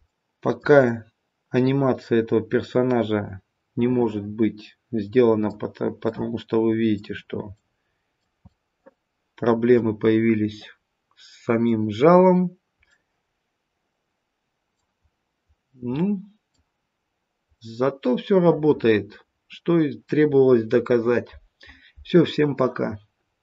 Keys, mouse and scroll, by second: 0.0 middle click, 0.5 shift+middle click, 6.0 middle click, 7.5 middle click, 12.8 middle click, 12.8-13.6 scroll down 1, 15.0-15.5 scroll up 1, 15.5-15.9 scroll down 1, 15.9 middle click, 15.9-16.5 scroll down 1, 17.5 middle click.